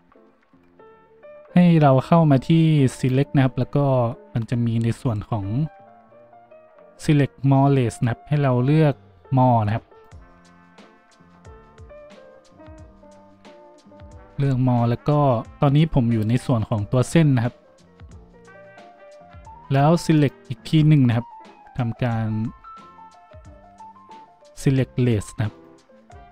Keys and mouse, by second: 3.1-26.3 drag.